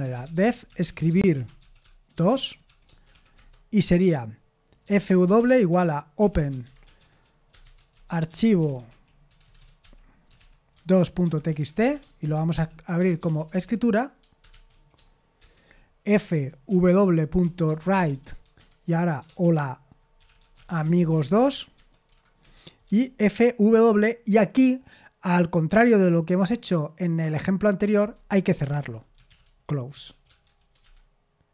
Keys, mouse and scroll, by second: 0.0-3.3 typing, 4.6-23.2 typing, 22.1 Escape, 28.9-31.5 typing.